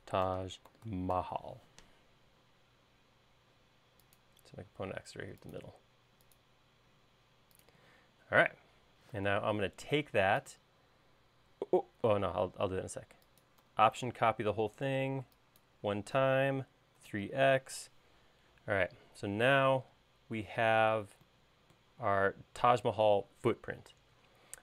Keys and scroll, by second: 0.0-1.7 typing, 9.1 q, 16.8-17.8 typing, 19.9 space.